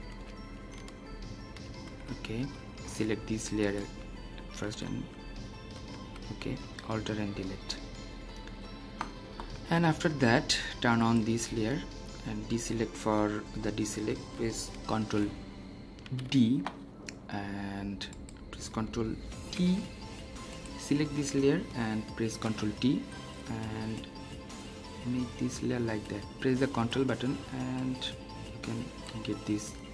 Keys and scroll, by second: 0.9 alt+Delete, 2.3 Escape, 4.9 alt+Delete, 15.9 ctrl+d, 19.3 ctrl+t.